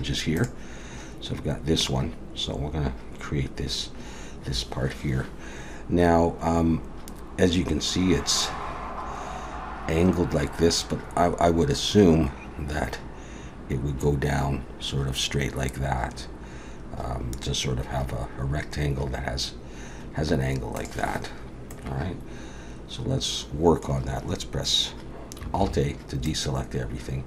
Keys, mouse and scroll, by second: 21.7 middle click, 25.6 alt+a, 26.2 middle click.